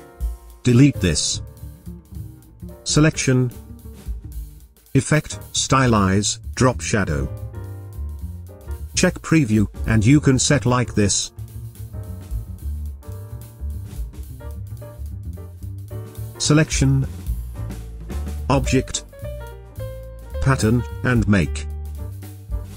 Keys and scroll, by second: 1.9 Delete.